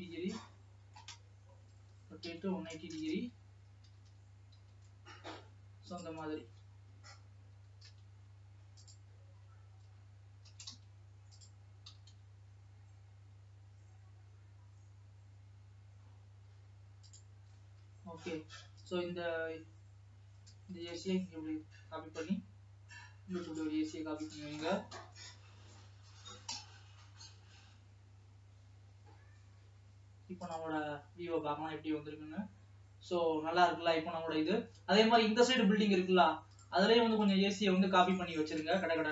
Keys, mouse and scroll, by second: 0.6 middle click, 1.3 scroll up 2, 1.6-2.0 scroll down 1, 2.0 r, 3.9 g, 6.8-7.7 scroll down 1, 7.7 g, 10.5 shift+d, 12.0 g, 19.0 click, 20.8 shift+d, 24.4 click, 25.0 Right, 25.3 KP_Decimal, 26.5 KP_0, 27.5 alt+a, 27.8 scroll down 2, 28.4-29.7 scroll up 1, 31.0-37.5 drag.